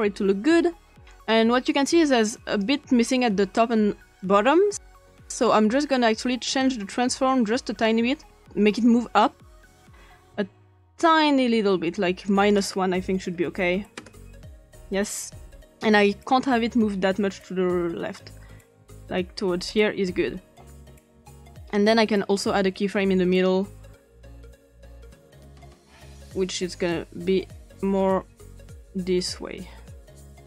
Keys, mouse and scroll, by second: 2.2-2.6 drag, 4.7 click, 6.6 click, 7.8-8.3 drag, 11.1 scroll down 1, 12.3 click, 13.0-13.9 typing, 14.0 Return, 16.4-19.7 drag, 21.6 click, 23.3 click, 26.9-30.4 drag.